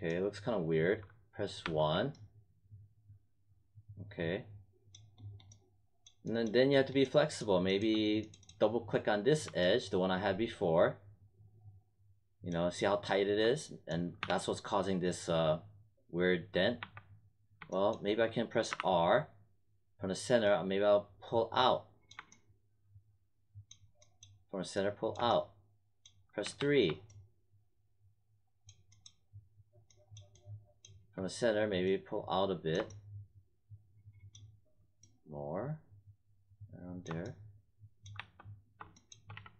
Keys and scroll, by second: 1.6 1, 14.2 3, 16.7 1, 18.6 r, 26.4 3, 38.1 1, 39.3 w.